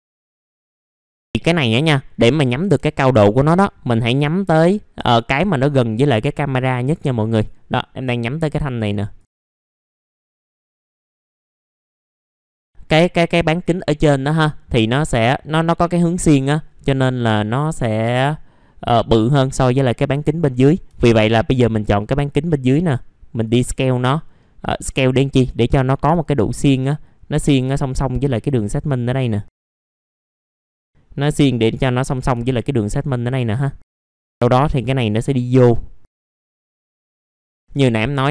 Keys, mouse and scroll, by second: 0.0 alt+middle click, 0.4 middle click, 0.4 scroll down 1, 0.5 middle click, 0.7 scroll up 1, 0.9 middle click, 2.6 1, 3.6 middle click, 4.2-10.0 drag, 10.0 1, 10.1 alt+middle click, 10.6 alt+middle click, 10.9 alt+middle click, 11.7 click, 11.9 alt+middle click, 12.2 middle click, 12.3 alt+middle click, 12.6 alt+middle click, 13.4 scroll down 1, 13.6 middle click, 14.0-14.3 scroll down 1, 14.4 middle click, 15.1-16.8 scroll up 1, 16.8 middle click, 20.2 alt+middle click, 20.6 scroll up 1, 22.0-23.5 drag, 23.7 alt+middle click, 24.8 alt+middle click, 26.2-30.7 drag, 30.8-32.2 scroll up 1, 32.2 scroll down 1, 32.4 alt+middle click, 33.6 alt+middle click, 34.9-36.3 drag, 36.4 alt+middle click, 36.8 click, 37.4 scroll down 1, 37.4 alt+scroll up 1, 37.9 middle click, 38.0 scroll down 1, 38.2 alt+middle click.